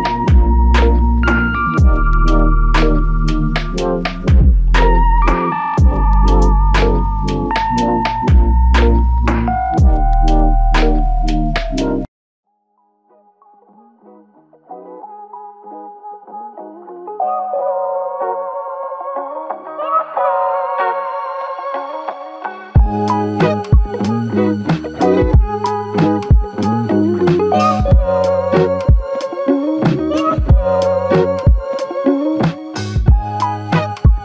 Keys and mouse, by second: 2.1 alt+click, 7.9 ctrl+alt+click, 8.9 alt+click, 10.2 double click, 12.2 alt+click, 13.4 alt+click, 15.3 double click, 15.9 alt+click, 16.9 double click, 17.3 alt+click, 20.1 alt+click, 23.5 alt+shift+click, 24.8 ctrl+alt+click, 25.6 alt+click, 26.9 double click, 28.2 alt+click, 30.2 double click, 30.6 alt+click.